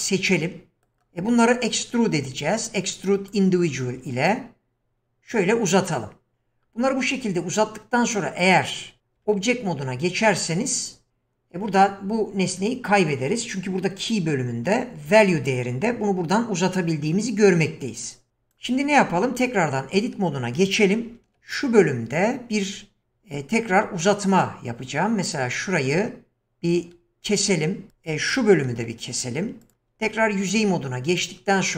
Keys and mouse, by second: 0.3 middle click, 2.0-3.3 drag, 4.3-6.3 drag, 9.2 Tab, 15.1-18.6 drag, 19.1 Tab, 21.1 ctrl+r, 28.7 ctrl+r, 30.0 3.